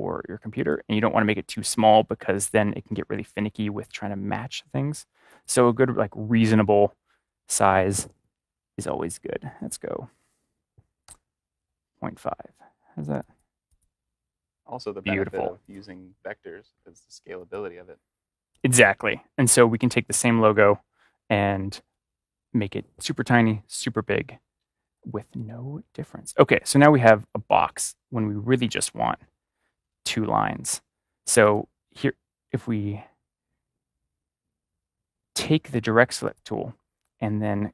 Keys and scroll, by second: 10.0 Right, 10.9 typing.